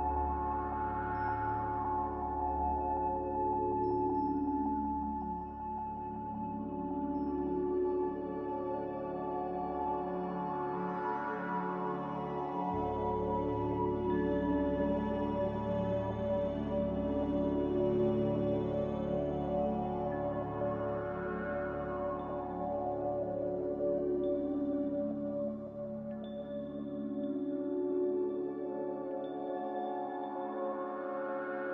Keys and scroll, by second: 1.7 ctrl+c, 5.3 n, 9.1-9.8 typing, 12.1 ctrl+c, 13.9-14.6 typing, 16.1 n, 16.5 z, 25.2 Escape, 28.2 a.